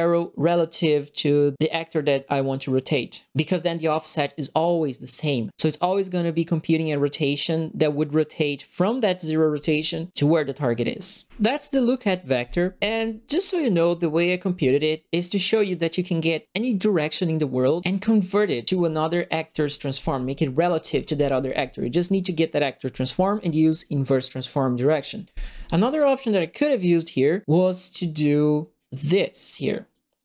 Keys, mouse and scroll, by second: 19.4 click, 23.7 click, 28.6 right click, 29.9 click.